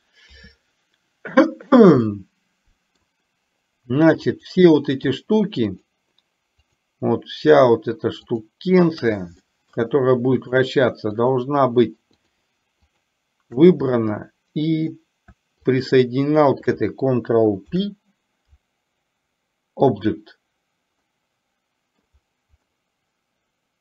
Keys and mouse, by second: 2.2-3.2 middle drag, 4.4 click, 5.8 shift+click, 6.8 shift+click, 9.5 middle drag, 10.4 shift+click, 11.3 shift+click, 12.3 shift+click, 13.0 shift+click, 14.0-14.9 middle drag, 15.8 shift+click, 17.8 ctrl+p, 21.2-22.2 middle drag, 22.8-23.8 middle drag.